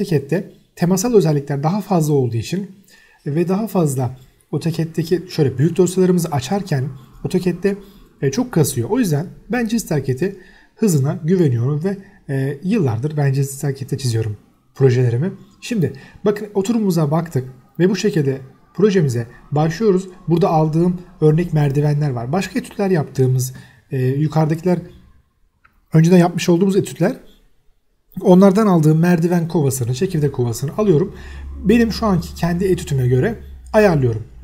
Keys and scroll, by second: 0.0 e, 0.1 space, 0.7 Escape, 1.8 c, 2.2 space, 4.1 Escape, 8.8 Escape, 9.1 m, 9.4 space, 9.5 Escape, 9.8 m, 10.4 Escape, 11.2-13.6 typing, 12.2 Escape, 13.0 F8, 13.4 Escape, 14.4 Escape, 15.8 c, 16.2 Escape, 16.8 space, 17.4 Escape, 20.4 c, 20.6 Escape, 23.2 Escape, 23.7 m, 23.9 space, 25.0 y, 25.1 space, 27.7 x, 28.2 space, 28.3 v, 28.4 space, 29.1 Escape, 29.9 x, 30.3 space, 30.4 h, 30.5 space, 30.9 Escape, 31.6 Escape, 31.7 e, 31.8 space, 32.1 m, 32.2 space, 33.7 m, 34.1 Escape.